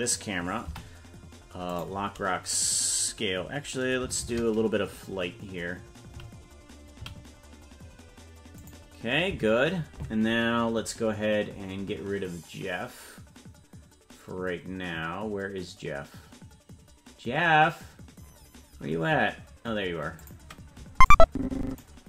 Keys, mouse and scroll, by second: 0.6 i, 4.4 shift+`, 18.8-19.2 scroll up 4, 20.2 click, 21.1 click.